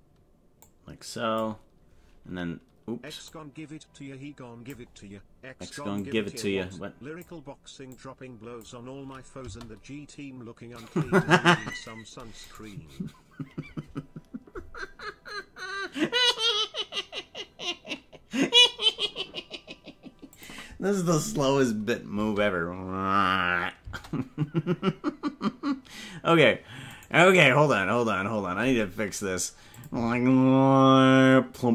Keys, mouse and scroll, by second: 0.8 click, 3.4-4.8 drag, 6.0-7.4 drag, 8.0 click, 9.4 space, 11.1 space, 12.4 right click, 20.4 click, 22.1 space, 23.9 space, 26.9 right click, 29.7 click, 29.9 space.